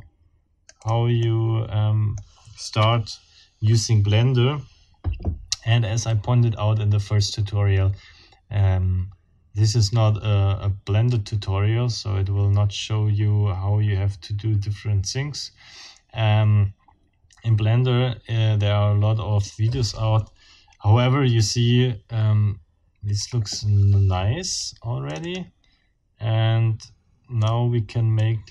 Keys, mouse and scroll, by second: 0.8 click, 1.2-2.0 drag, 2.8 F12, 23.2 Escape, 24.5 click, 25.1 click, 25.3 right click, 27.4 scroll up 1, 28.1-28.5 scroll up 1.